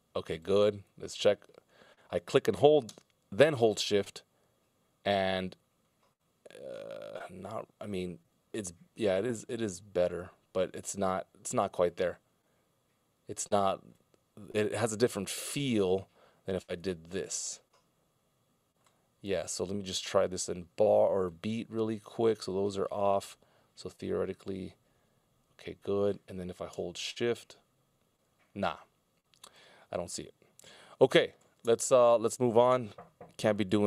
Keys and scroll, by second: 19.8 super+z, 30.9 super+z, 31.6 super+z.